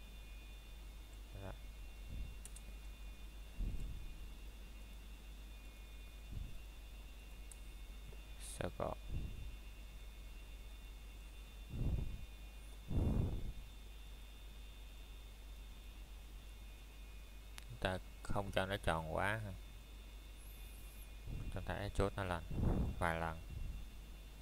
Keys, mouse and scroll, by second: 2.5 click, 3.8 middle click, 4.3-4.7 scroll up 1, 5.1 middle click, 5.9 scroll up 1, 5.9 typing, 6.3 middle click, 6.9 scroll up 1, 10.0 middle click, 10.4 scroll up 1, 10.7 middle click, 10.9 scroll down 1, 12.5 middle click, 12.9 scroll up 1, 13.3 middle click, 13.7 scroll up 1, 14.0 middle click, 15.2 ctrl+z, 18.3 shift+click.